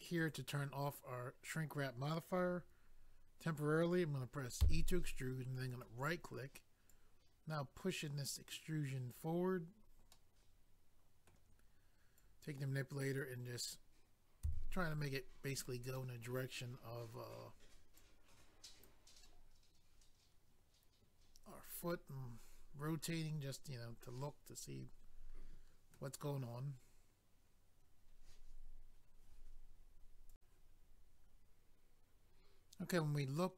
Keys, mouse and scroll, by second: 0.2 click, 0.3 click, 5.7 right click, 5.8 right click, 6.9 click, 9.7 scroll down 1, 10.1 middle click, 12.2 click, 14.4 s, 15.5 click, 15.6 click, 15.9 middle click, 18.0 click, 19.2 middle click.